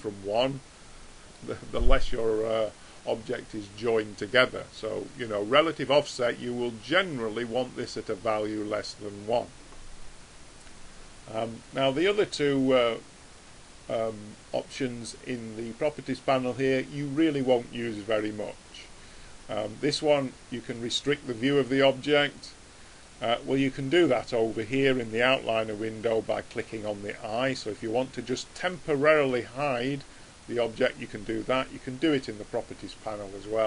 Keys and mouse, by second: 0.1-4.3 middle drag, 4.3-7.9 drag, 11.7-15.4 drag, 20.9 click, 25.8 click.